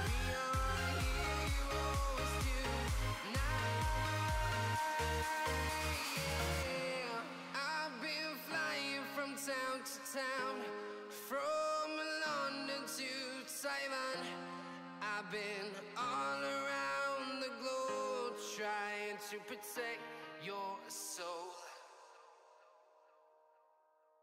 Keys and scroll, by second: 13.7 Escape, 16.2 Escape, 19.5 Escape, 20.5 Escape, 21.5 Escape, 23.6 Escape.